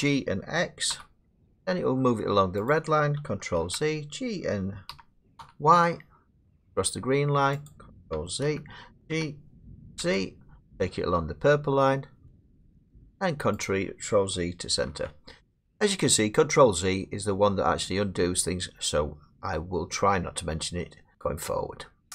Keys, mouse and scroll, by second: 0.9 x, 2.7 click, 3.6 ctrl+z, 4.9 g, 5.4 y, 7.7 click, 8.5 ctrl+z, 9.1 g, 10.0 z, 13.7 click, 14.9 ctrl+z.